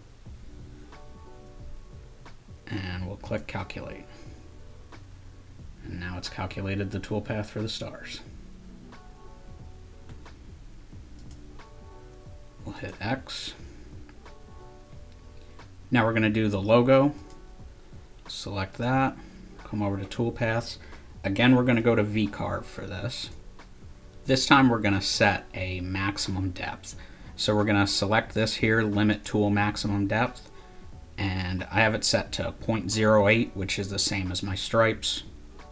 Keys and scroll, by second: 0.0-0.1 typing.